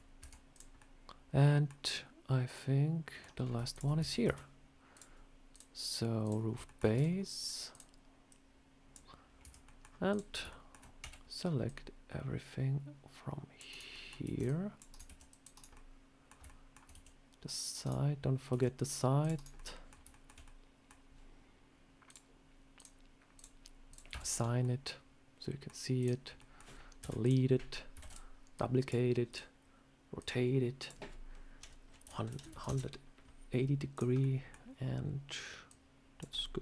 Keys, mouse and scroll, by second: 0.1 Tab, 0.4 click, 0.7 middle click, 1.8 middle click, 3.3 scroll up 3, 3.6 shift+click, 3.9 Tab, 4.1 a, 4.8 click, 5.4 click, 5.4 shift+click, 6.3 scroll up 2, 6.5-7.1 shift+scroll down 4, 6.5 shift+middle click, 6.8 Tab, 7.3 click, 7.6 click, 8.1 click, 9.3 Tab, 9.5 middle click, 10.0 click, 10.2 scroll up 2, 10.4 shift+middle click, 10.6 shift+scroll down 1, 10.9 c, 13.8 middle click, 14.1 c, 14.9 c, 15.6 middle click, 16.3 shift+middle click, 16.8 c, 18.3 scroll up 2, 19.4 middle click, 19.4 c, 20.0 shift+middle click, 20.3 middle click, 21.9 click, 22.6 click, 23.8 click, 24.0 Tab, 24.1 scroll down 3, 24.5 middle click, 25.9 click, 26.3 middle click, 26.9 Delete, 27.1 click, 27.9 shift+d, 28.4 click, 29.2 click, 30.1 click, 30.7 click, 33.8 click, 34.1 middle click, 35.5 click, 36.2 middle click.